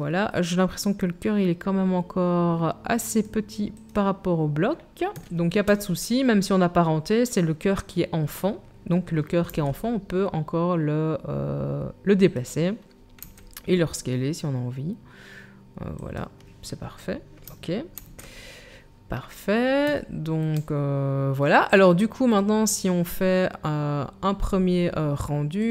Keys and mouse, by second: 3.9-12.3 drag, 9.5 g, 12.3-17.4 middle drag, 13.2 s, 17.4 ctrl+click, 18.0 ctrl+s, 18.1-25.7 middle drag.